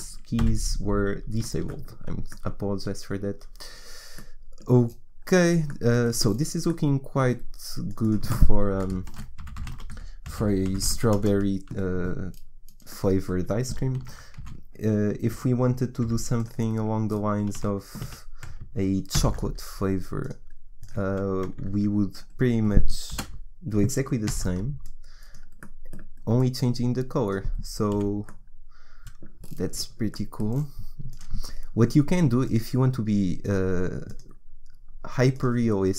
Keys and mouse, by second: 0.4 n, 7.9-10.6 middle drag, 10.8 r, 14.1 shift+d, 16.0 r, 17.6 a, 18.1 a, 19.1 ctrl+c, 20.2-22.1 drag, 23.1 Delete, 24.3 ctrl+v, 24.9 click, 28.0 Delete.